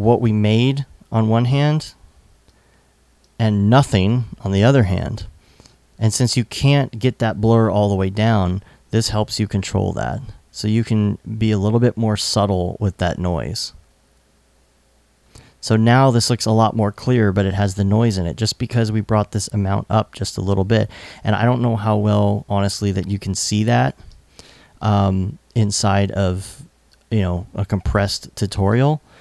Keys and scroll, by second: 20.3 i, 26.3 i.